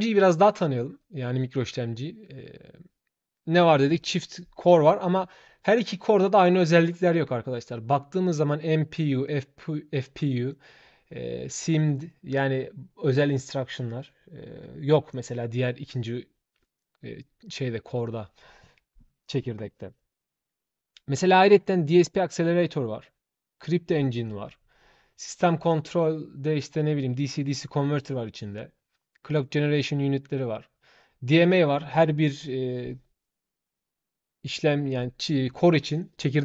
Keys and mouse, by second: 0.0 shift+click.